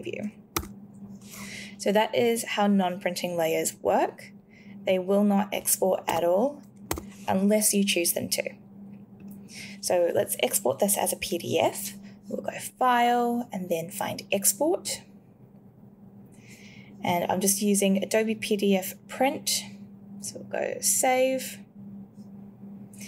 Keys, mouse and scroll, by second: 0.5 w, 6.1 w.